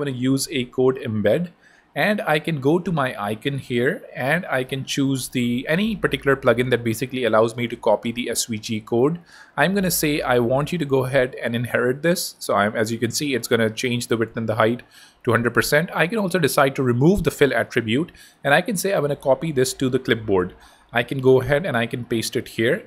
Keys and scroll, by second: 0.6 super+Left, 0.8 super+Tab, 4.7 super+p, 4.9-5.9 typing, 19.1 super+Tab, 20.3 super+v.